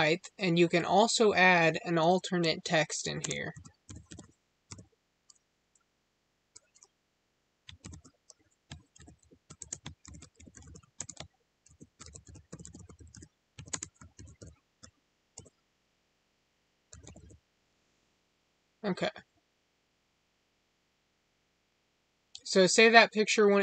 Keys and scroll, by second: 3.1 space, 9.5 space, 10.9 space, 13.6 space.